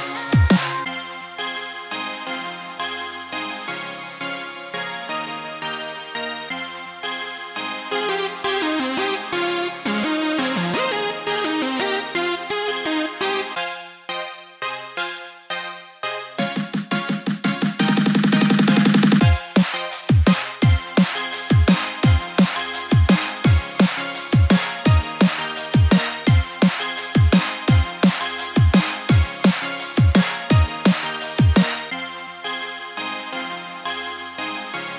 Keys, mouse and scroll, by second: 0.0-2.8 typing, 1.4 scroll up 1, 4.3 g, 5.5 KP_1, 5.9 shift+middle click, 6.2 shift+middle click, 6.3-6.6 scroll up 2, 7.7 Tab, 7.9 right click, 9.0 click, 10.1 click, 10.5 click, 12.1 middle click, 12.4 middle click, 13.5 click, 14.1 click, 14.3 middle click, 15.2 click, 15.5 middle click, 18.6 Tab, 18.8 click, 19.1 c, 20.6 click, 21.5 KP_3, 21.9 o, 22.3 g, 26.6 middle click, 28.3 KP_3, 28.8 g, 30.7 middle click, 31.2 middle click, 32.0 scroll down 1.